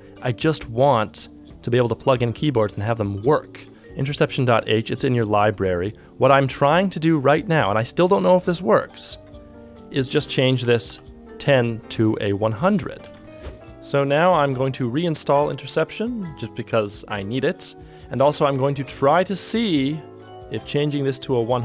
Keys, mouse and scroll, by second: 10.7 BackSpace, 10.9 0, 12.9 ctrl+z, 13.1 ctrl+z, 13.4-14.2 typing.